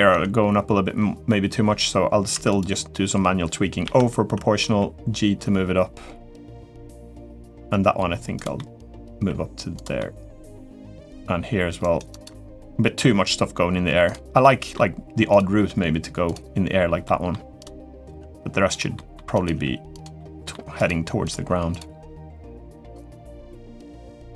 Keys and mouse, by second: 2.1 3, 2.3 click, 3.6 o, 4.4 g, 8.3 middle click, 8.9 g, 9.7 middle click, 10.8 click, 11.3 g, 12.0 g, 14.2 middle click, 15.1 click, 15.3 g, 16.8 middle click, 17.9 g, 18.7 middle click, 19.3 g, 19.9 middle click, 20.6 click, 21.0 click, 21.2 g, 21.8 middle click, 22.2 g, 23.1 Tab, 23.5-23.9 middle drag.